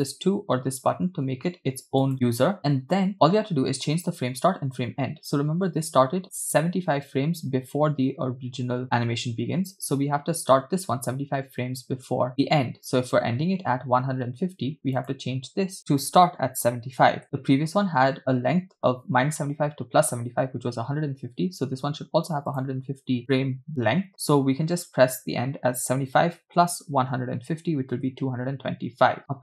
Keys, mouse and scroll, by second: 2.2 click, 3.2-5.4 scroll down 2, 15.1-17.3 drag, 22.6-28.0 drag.